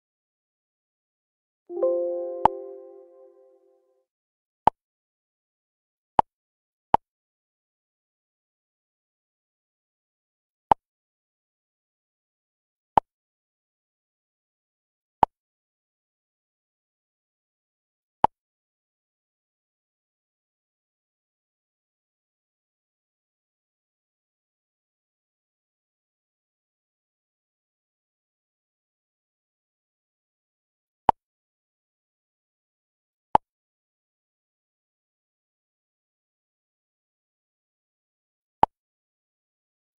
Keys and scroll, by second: 18.8 Up, 23.6 Up, 26.1 Down.